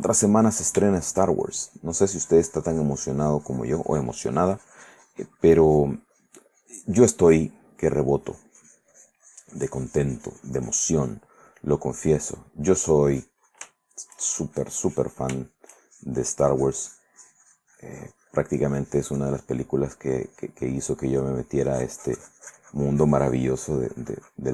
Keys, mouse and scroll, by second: 0.4 click, 1.2 shift+middle click, 1.6-7.8 shift+drag, 7.8 middle click, 8.5-11.5 drag, 11.5-12.0 scroll up 1, 12.0 middle click, 12.9 click, 13.4 click, 14.0 shift+middle click, 14.5 shift+click, 15.6 shift+middle click, 16.1-19.9 shift+drag, 20.4-24.5 drag.